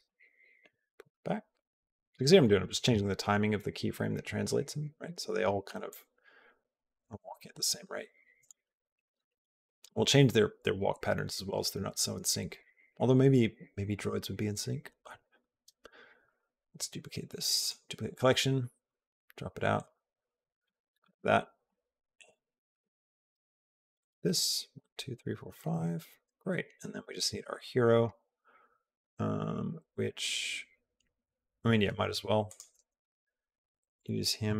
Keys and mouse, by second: 5.8-8.3 drag, 16.1 right click, 18.7 click, 20.0 click, 21.5 g.